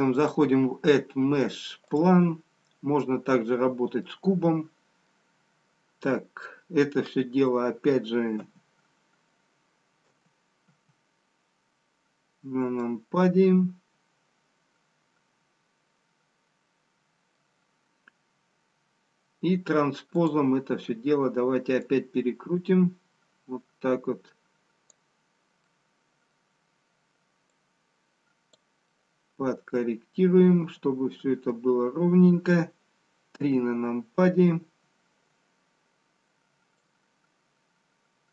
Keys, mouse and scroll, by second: 0.1 click, 2.9-4.7 scroll up 1, 4.7 middle click, 4.7-6.0 scroll up 1, 6.3-7.9 scroll down 2, 8.4 KP_7, 11.1 KP_2, 11.1 KP_1, 12.7 middle click, 20.1 click, 25.6 middle click, 25.6-27.3 scroll down 1, 28.1 click, 28.9 middle click, 35.5 KP_3, 37.0 click.